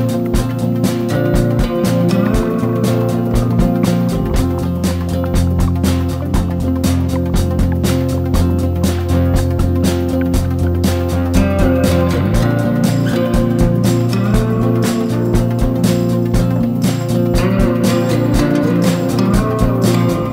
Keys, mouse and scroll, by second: 0.0 alt+shift+click, 0.4 s, 1.6 ctrl+b, 2.4 Tab, 3.3 ctrl+2, 3.5 click, 3.7 click, 3.9 Tab, 4.0 a, 4.1 s, 4.8 Tab, 5.1 g, 7.0 click, 7.2 click, 7.3 Tab, 7.5 a, 7.6 s, 8.3 Tab, 8.5 g, 10.0 shift+middle drag, 10.2 scroll up 1, 10.4 click, 10.6 click, 10.8 Tab, 11.3 3, 11.4 click, 11.6 click, 12.1 shift+click, 12.7 shift+d, 13.1 p, 13.4 Tab, 13.6 click, 13.9 shift+click, 14.2 drag, 14.4 shift+click, 14.7 Tab, 14.8 a, 15.0 e, 15.8 Tab, 16.5 click, 16.8 click, 17.0 shift+click, 17.3 s, 17.8 g, 19.5 drag, 19.7-20.3 scroll down 1.